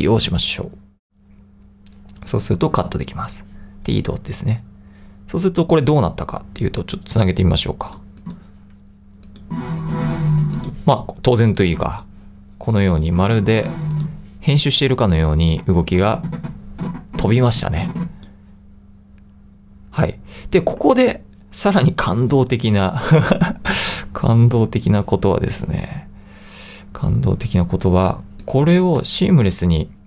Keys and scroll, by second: 1.1 BackSpace, 29.0 |.